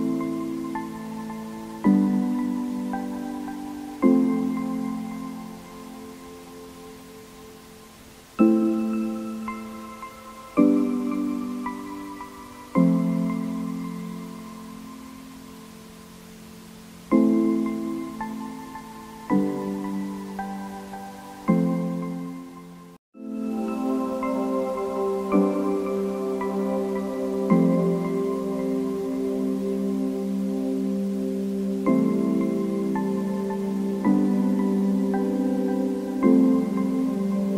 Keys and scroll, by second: 3.3 Down, 5.3 Up, 5.8 Down, 24.1 Down.